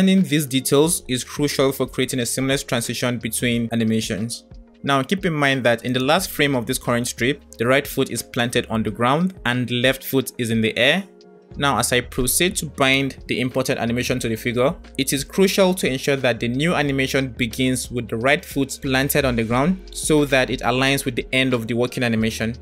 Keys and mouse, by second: 5.3-10.6 drag, 14.5 click.